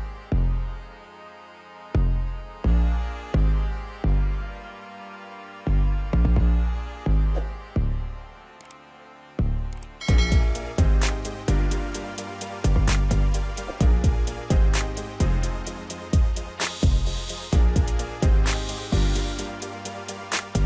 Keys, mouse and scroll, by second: 0.4-1.3 scroll up 2, 1.3 click, 2.4-5.8 drag, 5.8-6.4 scroll up 2, 6.4 KP_1, 7.1-7.8 scroll up 2, 7.8 Tab, 9.0 2, 9.7 click, 9.9 click, 10.7 shift+click, 10.8 shift+click, 11.7 shift+click, 11.8 shift+click, 12.3 middle click, 13.2 shift+click, 13.4 shift+click, 13.7-14.4 middle drag, 14.4 shift+click, 14.6 shift+click, 15.0 middle click, 16.0 shift+click, 16.1 shift+click, 16.4-17.5 middle drag, 17.5 shift+click, 17.6 shift+click, 18.0-19.2 middle drag, 19.2 shift+click, 19.4 shift+click, 20.1 KP_1.